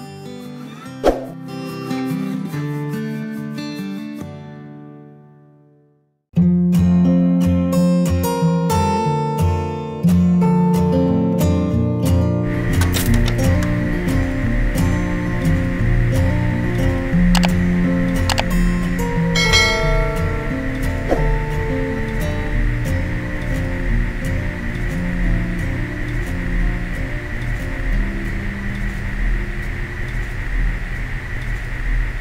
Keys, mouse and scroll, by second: 4.9 click.